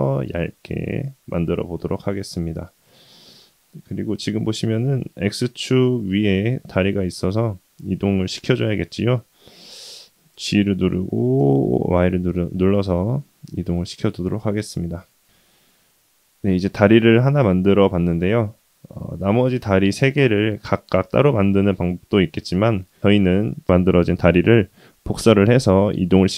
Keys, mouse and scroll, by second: 0.2-1.0 middle drag, 1.4-1.8 scroll down 1, 1.8-5.1 middle drag, 6.4-7.9 middle drag, 10.3 g, 13.3-14.4 middle drag, 14.9 middle click, 15.1 shift+middle click, 15.6 middle click, 19.4-20.4 middle drag, 24.6-25.9 middle drag.